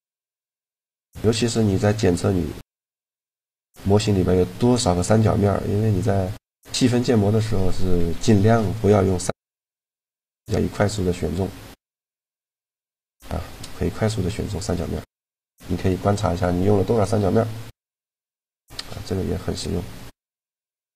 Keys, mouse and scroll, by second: 1.1-2.6 middle drag, 2.6-4.4 right drag, 3.8 z, 4.4 z, 4.9-6.5 middle drag, 7.8 click, 8.7-11.8 middle drag, 11.9-13.5 drag, 15.5 z, 16.0-18.0 middle drag, 18.7 a, 19.6 z.